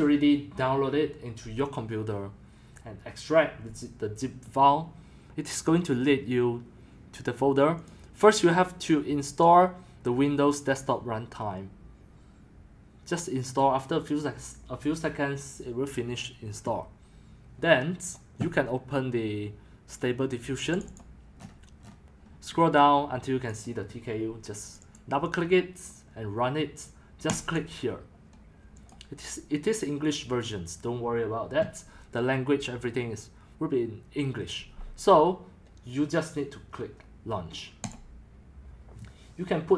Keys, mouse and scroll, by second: 7.9 click, 8.4 click, 13.6 click, 14.0 click, 18.1 click, 20.8 click, 20.9 click, 21.4-22.5 scroll, 22.5-23.6 scroll, 23.6 click, 24.9 click, 27.5 click, 37.9 click.